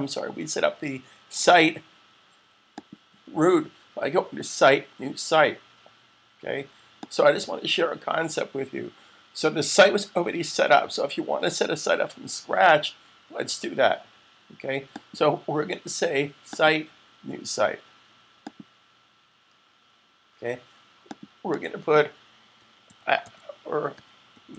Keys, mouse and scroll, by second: 2.5 click, 6.8 click, 14.7 click, 21.0 click, 21.6 double click, 22.3-24.5 typing.